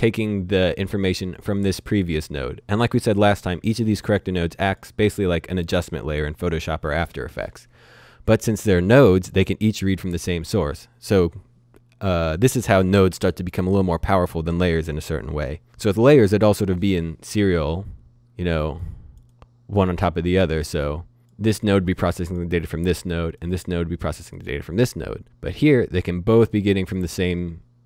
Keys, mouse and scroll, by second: 3.8 click, 10.4 click, 17.9 click.